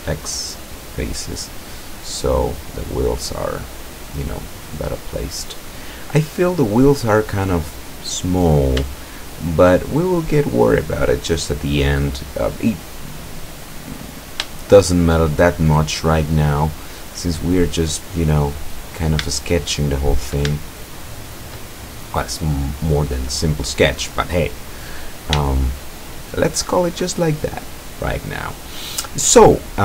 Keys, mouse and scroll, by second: 1.7-2.9 middle drag, 3.1 scroll down 1, 3.5-6.1 middle drag, 6.5-7.0 scroll up 1, 7.2 scroll down 1, 7.9-8.3 scroll down 1, 9.2 shift+middle click, 15.5-16.0 shift+scroll up 1, 19.4 shift+middle click, 20.7 shift+middle click, 21.5 shift+scroll up 1, 21.8 shift+middle click, 25.5 shift+middle click, 26.5 shift+middle click, 27.6-29.8 middle drag.